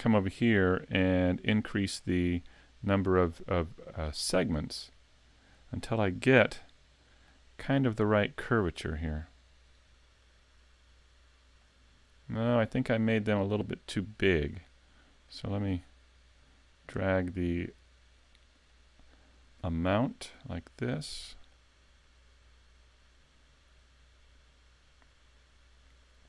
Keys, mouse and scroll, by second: 1.0 click, 4.5 click, 6.5 middle click, 8.7 click, 9.3 click, 10.3 click, 11.6 middle click, 15.3 click, 18.9 middle click, 21.5 click.